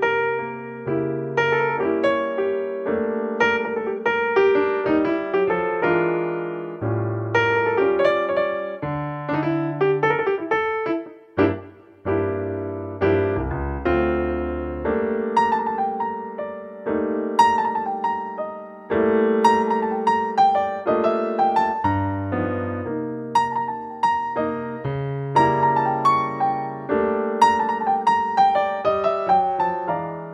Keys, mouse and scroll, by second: 2.8-4.5 right drag, 4.0 g, 4.6 right drag, 7.0-8.7 drag, 11.8 alt+r, 14.2 drag, 14.5 middle click, 14.9 click, 15.2 middle drag, 15.3 click, 15.5-18.4 middle drag, 18.4-21.8 drag, 21.6-23.0 middle drag, 23.0-24.9 right drag, 25.0-27.1 middle drag, 25.9-27.8 drag.